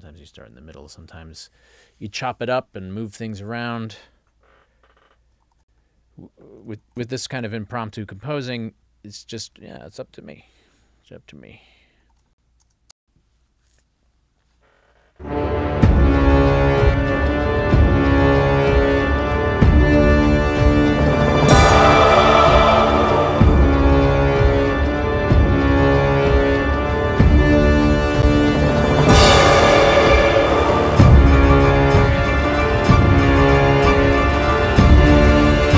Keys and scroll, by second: 5.6 ctrl+alt+l, 6.9 ctrl+alt+l, 12.1 ctrl+alt+l, 13.0 space.